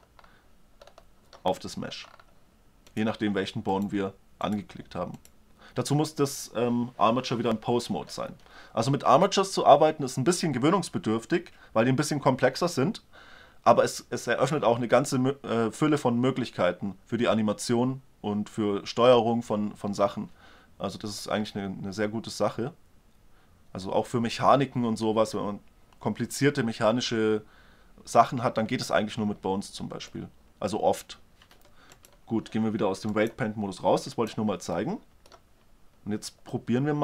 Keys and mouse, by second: 2.9-6.9 right drag, 30.2-31.4 middle drag, 31.4 g, 31.8-32.9 drag, 34.6-37.0 middle drag.